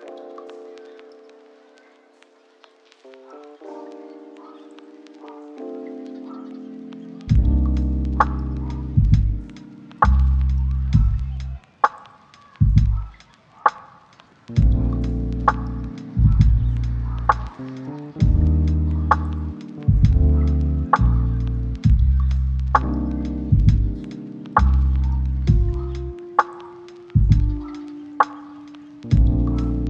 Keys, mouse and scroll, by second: 0.7 right click, 1.1 scroll up 1, 1.2 right click, 1.8 click, 5.1 click, 5.6 scroll down 1, 5.7 scroll up 1, 6.0 click, 6.3 middle click, 6.6 click, 6.8 scroll down 1, 7.1 scroll up 1, 7.2 right click, 7.5 scroll down 1, 7.7 scroll up 1, 7.8 right click, 8.4 right click, 8.7-9.3 scroll up 1, 9.3 click, 10.2 right click, 10.6 scroll up 1, 10.9 right click, 11.2-11.5 scroll up 1, 11.5-15.1 drag, 15.3-15.6 scroll down 1, 15.6 right click, 16.4-17.0 scroll up 1, 17.0-18.1 drag, 18.4-18.7 scroll down 1, 18.7 scroll up 1, 18.8 right click, 19.4 click, 24.1 click, 24.9 scroll up 1, 25.0 click, 26.9 click, 28.8-29.2 scroll up 1, 29.2-29.8 drag.